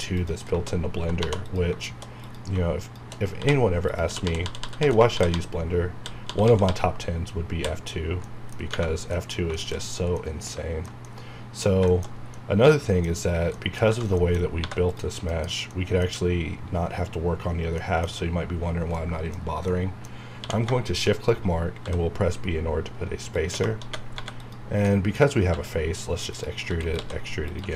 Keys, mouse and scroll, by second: 0.1 click, 1.2 2, 1.4 click, 2.2 click, 2.8 shift+click, 3.3-5.9 typing, 3.8 click, 4.9 middle click, 8.3 middle click, 8.9 scroll down 1, 9.1 middle click, 9.9 scroll down 1, 10.1 middle click, 11.0 middle click, 11.9 shift+middle click, 13.3 scroll down 1, 13.5 middle click, 13.9-14.4 scroll up 3, 13.9 Tab, 14.2 shift+middle click, 14.6 3, 14.8 click, 14.9 click, 15.7-17.8 middle drag, 18.1-18.9 scroll up 1, 18.9 scroll up 1, 18.9 middle click, 20.1 scroll up 1, 20.4 q, 20.8 shift+click, 21.8 b, 23.4 click, 23.7-25.5 typing, 24.4 click, 24.9 middle click, 26.3 click, 26.6 e, 26.8 right click, 27.0 s, 27.4 click, 27.6 e.